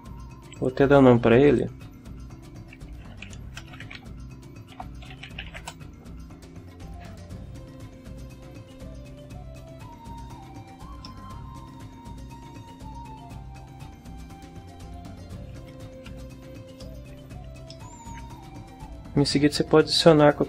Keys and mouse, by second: 0.5 click, 1.5 click, 3.3-6.0 typing, 11.0-13.1 drag, 14.8 t, 16.1 n, 16.8 ctrl+click, 17.7 ctrl+click, 17.9 ctrl+middle click.